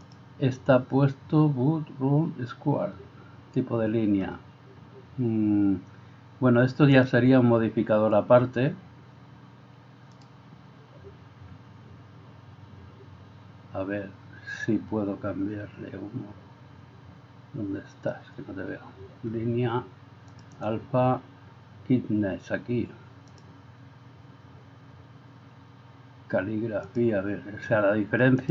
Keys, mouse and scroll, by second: 0.2-28.5 drag.